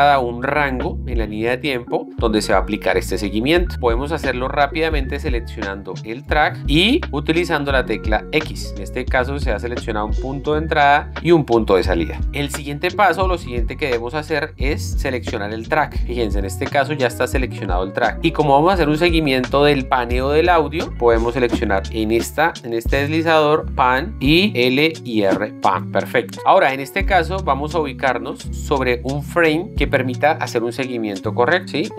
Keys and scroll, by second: 8.6 x.